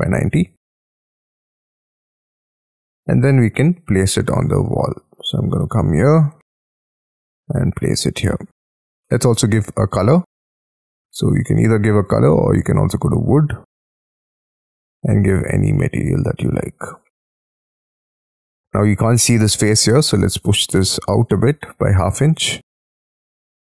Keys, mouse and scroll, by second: 0.4-2.6 typing, 1.0 Return, 2.7-4.2 scroll down 31, 4.2 scroll up 4, 4.5 shift+middle click, 6.2-7.2 scroll up 17, 8.2 middle click, 11.0 scroll down 5, 11.3-12.5 scroll up 5, 12.5-15.7 scroll down 1, 15.7 middle click, 16.7 space, 16.8-17.5 scroll up 12, 17.5 middle click, 18.0 m, 21.7-23.5 typing.